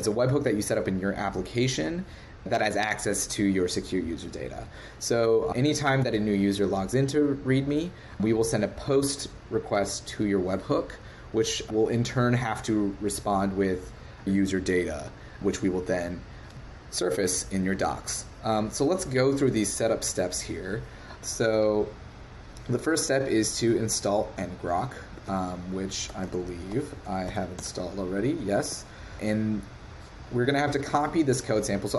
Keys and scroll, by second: 25.1 super+Tab, 28.6 super+Tab.